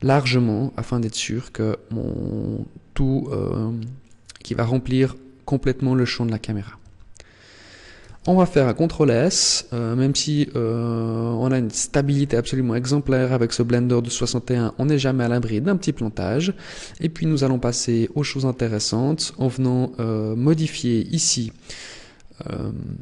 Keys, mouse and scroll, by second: 3.9 click, 6.6 Tab, 8.0 ctrl+s, 17.8 click, 20.2 click.